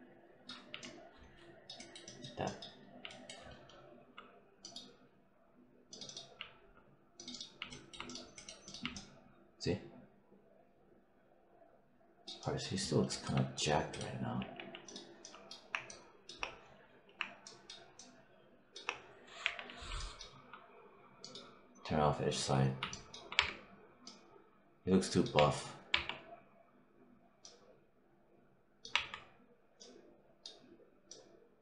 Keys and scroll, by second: 0.4 5, 14.2 4, 19.3 6, 23.2 3, 25.2 1, 28.8 1.